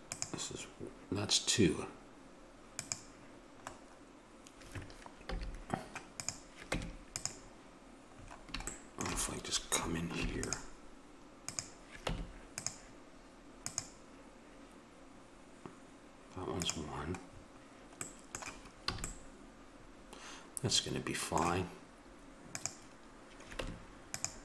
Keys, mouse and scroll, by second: 2.7 click, 3.7-5.2 middle drag, 5.2 a, 6.6 Tab, 10.1 ctrl+r, 12.0 Tab, 13.6 right click, 16.5-18.5 middle drag, 18.9 a, 19.2 middle click, 20.0 middle click, 20.2 middle click, 20.3 middle click, 20.6 middle click, 22.7 right click, 23.5 Tab.